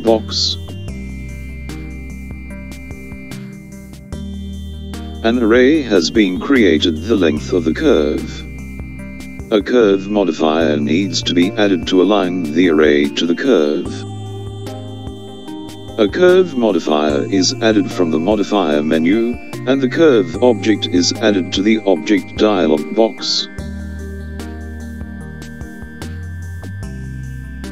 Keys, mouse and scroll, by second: 3.9 click, 15.2 click, 20.5-22.4 scroll down 1, 22.4 click.